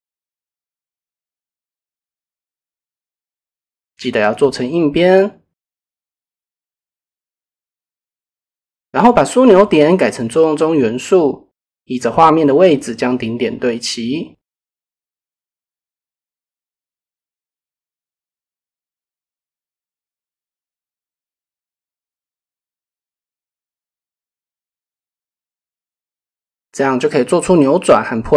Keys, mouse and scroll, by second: 0.3 KP_7, 3.9 click, 5.6 shift+click, 6.0 middle click, 7.6-8.6 middle drag, 9.9 middle click, 11.8 middle click, 14.7 z, 15.1 KP_0, 15.4 KP_Enter, 16.0 middle click, 16.6 middle click, 17.0 shift+middle click, 18.2 middle click, 19.0 shift+middle click, 19.3 middle click, 20.2 click, 20.6 shift+middle click, 22.9 z, 23.2 KP_0, 23.5 KP_Enter, 24.4 middle click, 25.3 KP_7, 26.2 shift+middle click, 26.8 Tab, 27.4-28.3 middle drag.